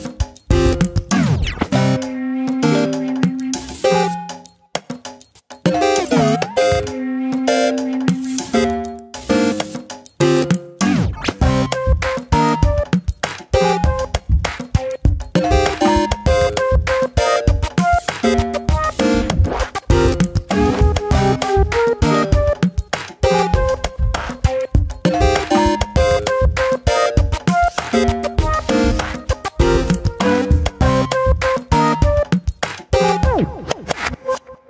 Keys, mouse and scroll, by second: 0.9 shift+middle click, 1.4 scroll up 1, 1.6 shift+middle click, 2.3 alt+/, 2.4 click, 3.8 ctrl+KP_Subtract, 4.9 click, 5.7 ctrl+KP_Add, 6.2 Delete, 7.2-7.8 scroll up 1, 7.8-8.8 drag, 9.6 ctrl+KP_Add, 10.0 Delete, 11.1-11.5 scroll down 1, 11.5-12.5 scroll up 1, 12.8 ctrl+z, 13.1-14.0 scroll up 1, 14.0 click, 14.6 click, 15.5 click, 17.3-17.9 scroll down 3, 17.6 alt+/, 17.9 middle click, 18.3 click, 18.4 scroll up 1, 18.7 middle click, 19.2 scroll down 3, 19.3 shift+middle click, 19.6 KP_7, 19.9 scroll down 1, 20.0 shift+middle click, 20.4 Tab, 20.7 click, 21.5-22.1 scroll down 1, 22.1-23.1 drag, 23.7 Tab, 24.0 s, 25.7 click, 26.2 Tab, 26.5 click, 27.3 Tab, 28.5 ctrl+r, 29.4 click, 30.1 Delete, 31.0 click, 31.7 click, 32.1 shift+middle click, 32.4 click, 33.2 ctrl+r.